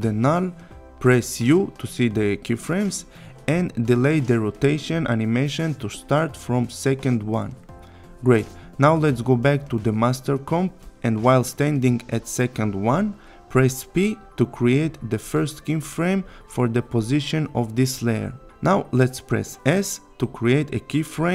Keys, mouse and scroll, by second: 0.6 u, 1.6-2.3 click, 4.7-6.0 click, 8.0 click, 11.3 p, 16.5 click, 19.1 s, 20.4 click.